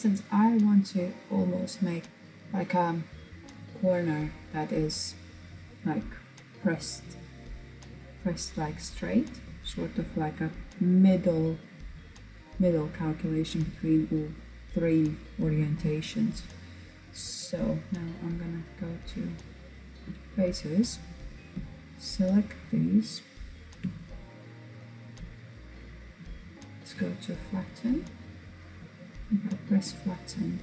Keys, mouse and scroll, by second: 17.2-19.7 drag, 20.9 shift+click, 22.1 shift+click, 25.0 click, 26.0 click, 28.2-30.6 drag.